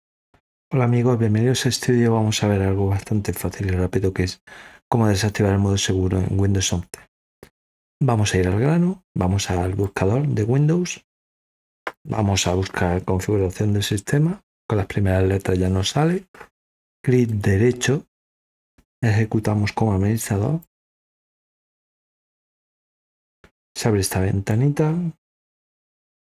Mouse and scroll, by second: 7.3 scroll down 2, 9.8 click, 11.5 scroll up 2, 11.9 click, 15.5-15.9 scroll down 2, 17.2 right click, 20.5 click.